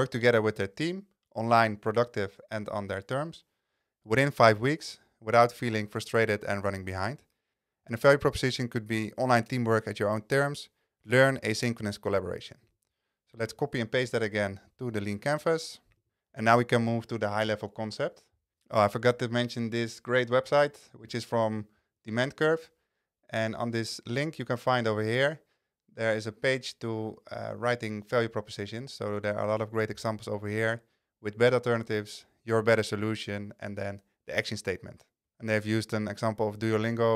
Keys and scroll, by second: 13.5 super+c.